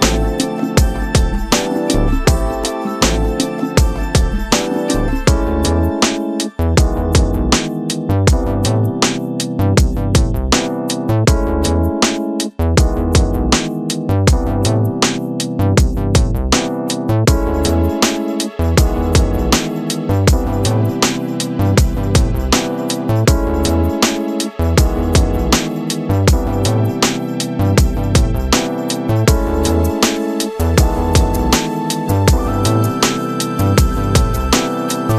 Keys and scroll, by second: 0.0 5, 0.7 Return, 2.5 ], 18.4 [, 20.4 space, 23.0 space, 32.0 space, 34.8 space.